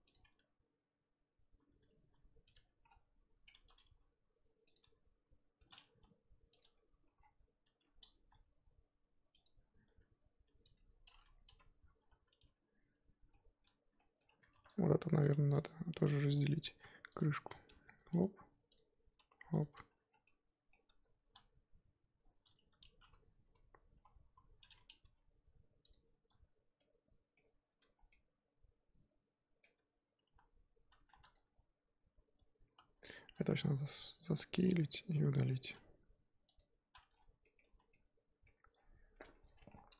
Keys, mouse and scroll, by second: 0.2 Tab, 1.6 Tab, 2.0 g, 2.5 Tab, 3.8 g, 4.8 Tab, 5.6 Tab, 5.8 g, 6.6 Tab, 7.8-8.1 scroll up 1, 8.1 g, 9.8 Tab, 10.4 Tab, 10.6 click, 11.4 l, 13.9-14.7 middle drag, 14.7 click, 15.6 alt+shift+click, 17.6 g, 18.7 click, 19.1 g, 19.7 Tab, 20.0 scroll down 3, 20.2-20.8 middle drag, 20.8-21.3 scroll up 1, 21.3 a, 22.5 click, 23.4 l, 23.9 l, 24.1 l, 25.0 g, 26.8-27.4 middle drag, 27.4-27.8 scroll up 2, 27.8 Tab, 27.9 scroll down 1, 28.1-29.6 middle drag, 29.6 Tab, 30.0 scroll up 2, 30.2 z, 31.3 click, 32.7 z, 33.3 s, 34.9-36.5 middle drag, 36.5 x, 37.1-37.4 scroll down 3, 37.4-37.7 middle drag, 37.7 z, 37.9-39.7 middle drag, 39.7 scroll down 4.